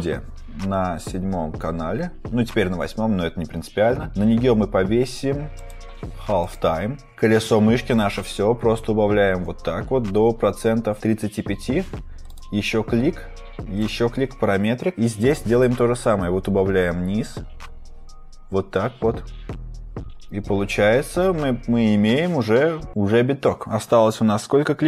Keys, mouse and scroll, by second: 1.1-2.0 scroll, 5.5 click, 6.4 click, 7.1 scroll.